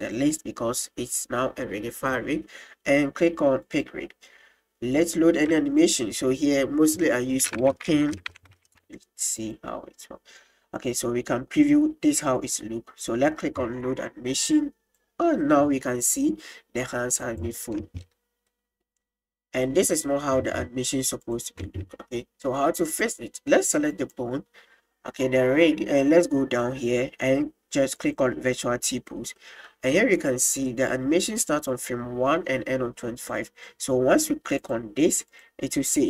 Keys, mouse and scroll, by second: 3.6 click, 5.8-9.5 drag, 10.8 click, 13.0 click, 14.6 click, 16.2 click, 17.9 space, 18.7 middle click, 20.4 space, 21.2 click, 23.9 right click, 28.0 click, 29.4 middle click, 30.7 middle click, 34.8 click, 35.3-36.0 drag.